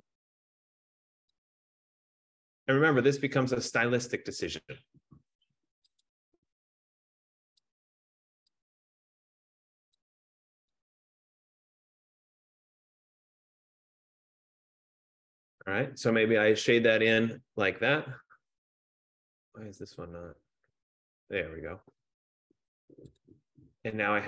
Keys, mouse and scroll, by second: 0.0-0.3 typing, 1.6 click, 4.2 click, 6.1 click, 7.7 click, 8.8 click, 10.2 click, 11.2 click, 11.9 click, 14.0 click, 20.4 click, 23.4 click.